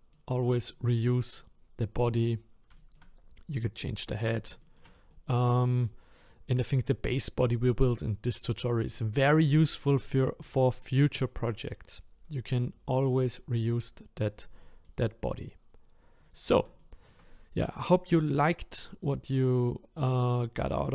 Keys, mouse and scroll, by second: 2.3-2.7 scroll up 1, 2.8-4.2 shift+middle drag, 4.2-4.6 scroll down 2, 4.6-12.6 shift+middle drag, 13.1 click, 13.7-14.6 scroll up 1, 14.6-16.2 middle drag, 16.2 click, 16.8-20.9 shift+middle drag.